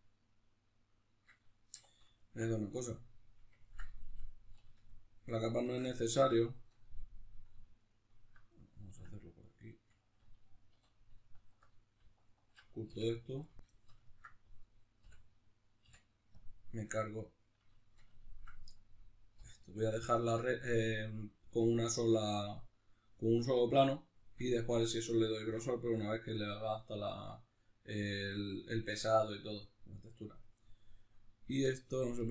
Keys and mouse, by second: 1.7 2, 2.2 alt+right click, 2.6-4.9 middle drag, 4.9-5.9 alt+shift+right drag, 5.9-7.8 middle drag, 7.8 alt+right click, 8.5-11.3 ctrl+middle drag, 10.7 3, 11.3-13.5 alt+right drag, 13.5 x, 13.7 shift+middle click, 14.6 right click, 15.0 l, 16.9-18.7 middle drag, 18.7 right click, 19.3 l, 19.7-32.3 middle drag.